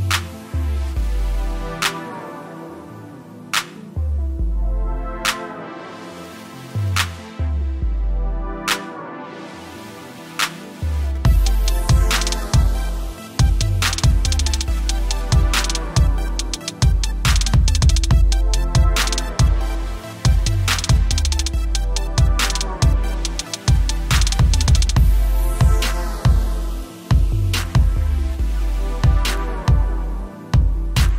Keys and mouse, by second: 1.2 click, 6.4 Return, 8.5 =, 11.3-12.1 typing, 17.7 ctrl+Num_Lock, 19.4 click, 27.9-29.2 typing, 29.9 click.